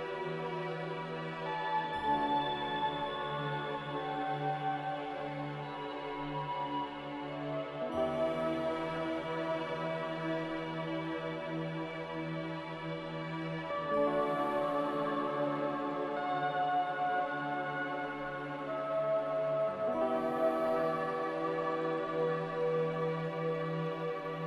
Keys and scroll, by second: 3.6 5, 3.8-6.1 Return, 10.6 BackSpace, 10.7 4, 11.0 Return, 16.7 z, 18.0 Delete.